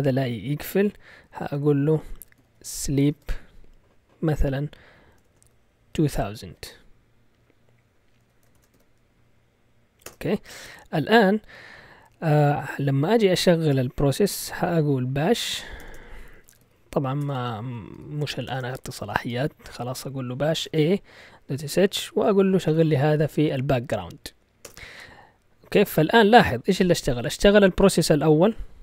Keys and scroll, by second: 0.3 Down, 0.5 Down, 1.4-3.5 typing, 4.8-6.3 typing, 8.2 Escape, 8.3-9.0 typing, 10.0 Return, 15.1-20.9 typing, 22.7 shift+7, 24.6 Return.